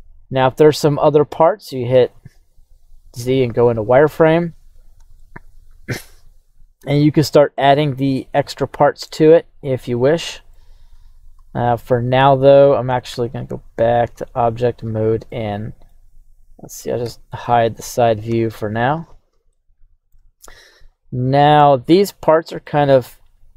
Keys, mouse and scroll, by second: 1.9 z, 5.2 shift+middle click, 7.6-10.5 middle drag, 10.9 z, 11.4-13.1 scroll down 1, 13.1 Tab, 13.6 right click, 14.7-15.3 scroll down 1, 15.3-15.9 middle drag, 15.3 scroll down 2, 16.2 right click, 17.0 h, 17.4 scroll down 1, 17.4-18.2 middle drag, 18.3 KP_1, 18.8-19.5 scroll up 5, 19.5-20.1 shift+middle drag, 21.4-22.1 scroll down 1, 22.2-22.6 shift+middle drag, 23.2-23.5 drag.